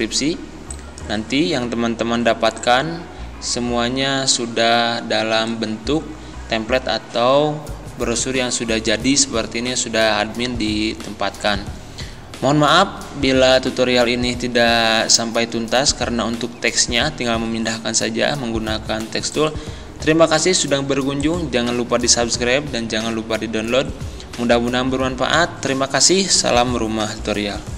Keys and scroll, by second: 2.1 z.